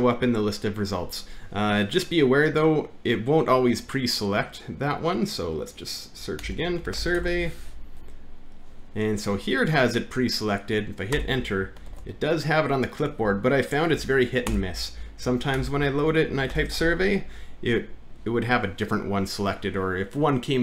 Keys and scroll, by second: 6.4 alt+`, 6.5-7.8 typing, 11.1 Return, 11.9 ctrl+v, 13.2 Home, 13.9 Up, 14.5 shift+BackSpace, 15.6 alt+`, 16.1-17.5 typing.